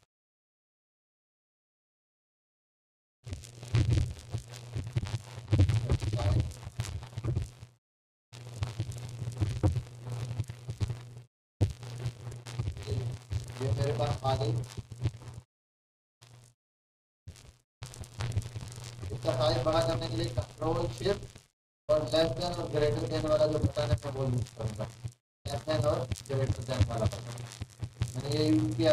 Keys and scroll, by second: 4.2-15.4 typing, 15.5 Left, 17.5 ctrl+s, 18.4 ., 18.6 ., 19.1 ., 23.6-25.8 typing, 27.6-28.0 typing.